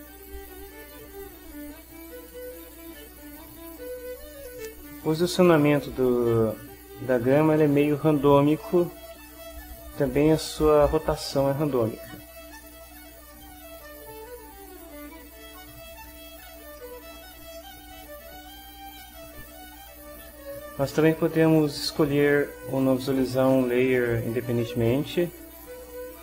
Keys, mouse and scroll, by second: 0.5-1.7 right drag, 3.4 click, 4.4 middle click, 5.4 click, 6.9 right click, 8.6 click, 10.9-12.0 right drag, 12.5 click, 12.8 middle click, 13.3 ctrl+click, 13.3 ctrl+middle click, 13.8 ctrl+click, 13.9 ctrl+middle click, 14.8 right click, 15.6 right click, 16.8 ctrl+click, 17.6 ctrl+middle click, 17.6 click, 17.7 middle click, 23.0 click, 23.6 click, 24.8 click, 25.3 click.